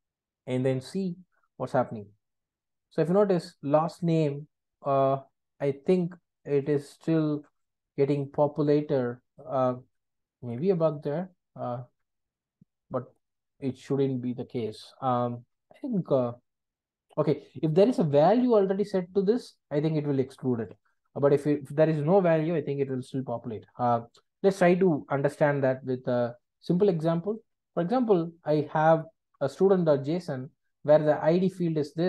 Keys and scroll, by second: 10.5 super+b, 23.7 super+BackSpace.